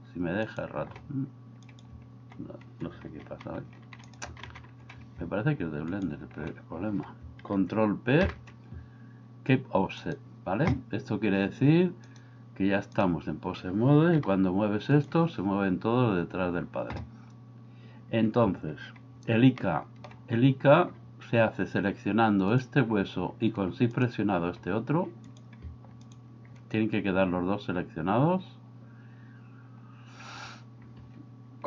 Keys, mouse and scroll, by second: 1.7 right click, 3.3 z, 4.4 ctrl+z, 8.3 ctrl+p, 12.2 click, 14.2 g, 19.6-20.1 shift+middle drag.